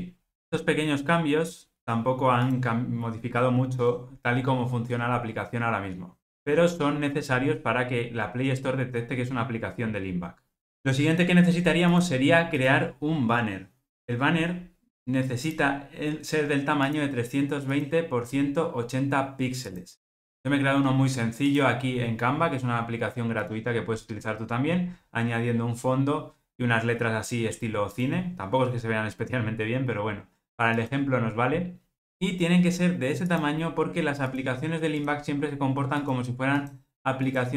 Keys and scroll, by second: 2.6 ctrl+r.